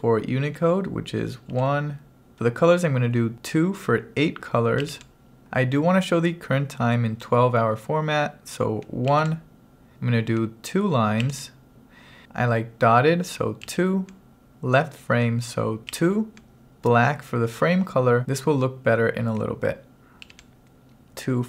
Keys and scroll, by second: 1.5 1, 4.9 2, 9.1 1, 11.3 2, 13.7 2, 16.0 2, 20.3 1.